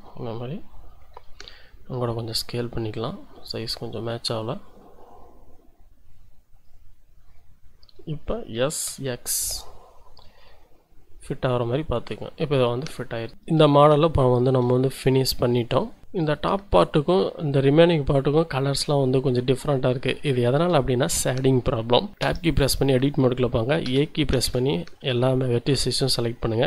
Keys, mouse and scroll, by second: 1.5 s, 2.9 click, 3.3-4.4 scroll up 1, 4.4-6.8 drag, 7.7-8.1 scroll up 1, 8.7 s, 8.9 x, 12.0 click, 12.5-13.0 scroll up 2, 13.0-13.3 scroll down 2, 13.7 shift+middle click, 14.9-16.0 shift+middle drag, 16.2 middle click, 17.5 middle click, 22.1 Tab, 22.2 Tab, 23.8 a, 24.4 a.